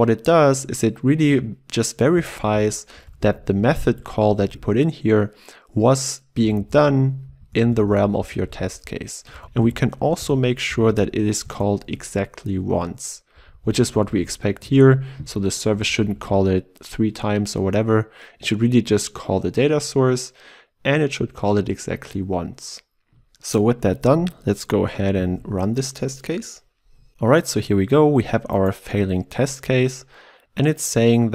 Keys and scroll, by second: 2.4 ctrl+alt+Left, 3.9 ctrl+w, 11.5 Return, 17.4 ctrl+w, 25.2 ctrl+shift+F10.